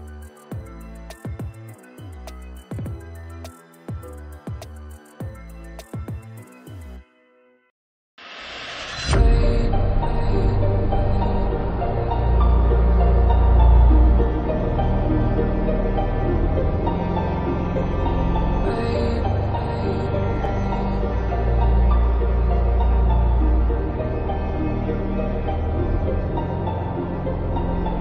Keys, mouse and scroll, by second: 3.4 scroll up 1, 4.1 scroll down 1, 4.5 click, 4.8 ctrl+space, 5.0-5.8 ctrl+click, 5.1 ctrl+space.